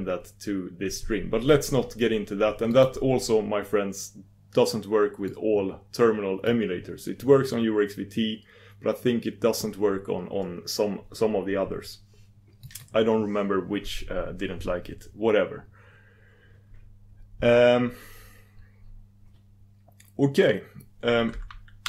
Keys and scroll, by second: 13.3 super+v.